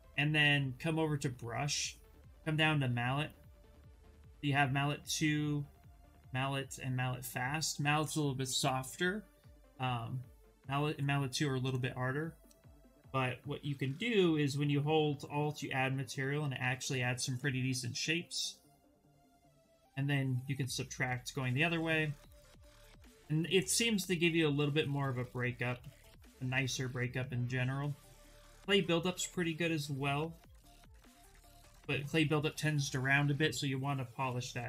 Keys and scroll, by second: 13.0 s, 17.3 s, 21.2 space, 22.9 ctrl+z, 23.0 ctrl+z, 23.2 ctrl+z, 23.3 ctrl+z, 23.5 ctrl+z, 23.7 ctrl+z, 24.0 ctrl+z, 24.5 ctrl+z, 24.7 ctrl+z, 25.5 ctrl+z, 25.7 ctrl+z, 25.8 ctrl+z, 26.2 ctrl+z, 28.0 b, 33.7-34.6 typing.